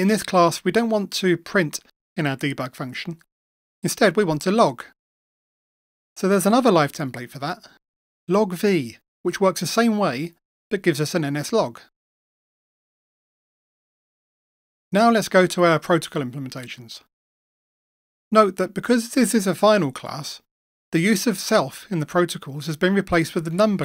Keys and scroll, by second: 11.0 Return.